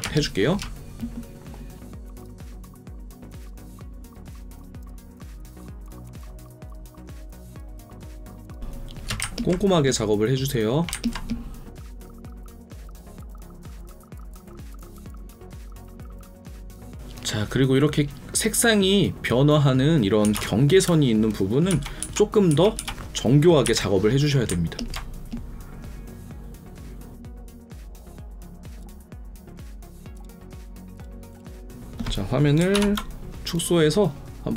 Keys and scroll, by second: 14.9 alt+space, 20.3 ctrl+KP_Add, 24.4 ctrl+KP_Add, 32.7 ctrl+0.